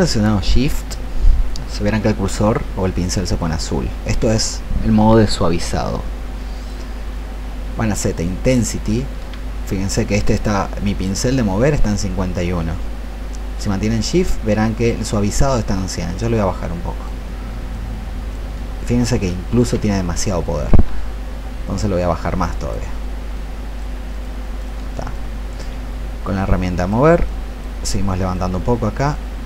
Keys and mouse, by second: 15.8 shift+click, 17.6 shift+click, 19.4 ctrl+z, 21.7 shift+click, 23.4 shift+click, 24.5 shift+click, 25.3 click, 26.3 alt+click, 27.2 alt+click, 27.8 alt+click, 29.0-29.4 drag.